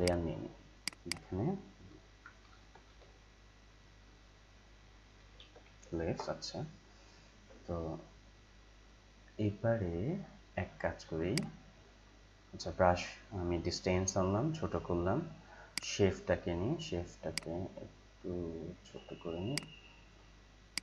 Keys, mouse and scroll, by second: 2.2-3.4 typing, 4.9-6.1 typing, 7.8 Return, 11.2 click, 15.7-20.8 drag.